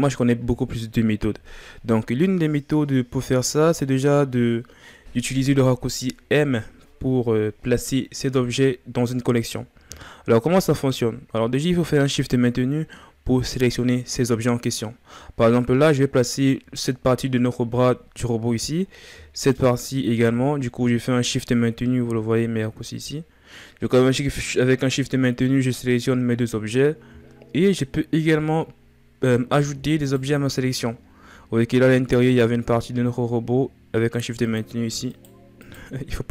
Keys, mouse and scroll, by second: 9.7-10.8 shift+scroll down 5, 10.8-11.5 ctrl+scroll up 3, 11.5-12.0 scroll up 3, 19.2-22.2 shift+right drag, 27.0-28.2 shift+scroll up 11, 29.8-30.7 shift+right drag, 30.7-32.2 ctrl+scroll up 11, 34.2 shift+right click, 35.3-36.3 shift+right drag.